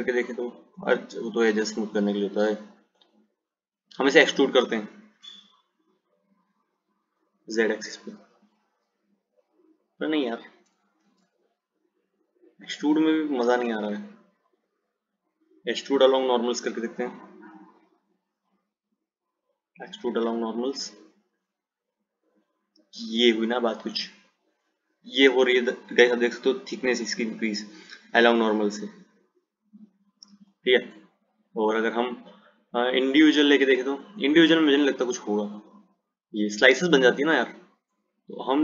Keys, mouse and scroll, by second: 1.8-5.0 drag, 13.9 ctrl+z, 15.9-20.8 drag, 21.8 click, 30.6 ctrl+z, 32.1-35.4 drag, 37.2 ctrl+z.